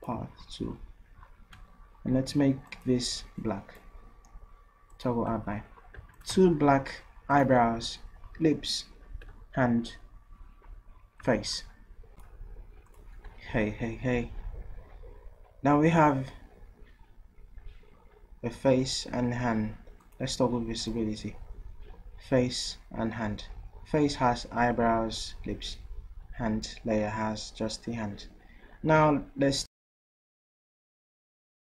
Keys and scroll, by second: 6.0 v.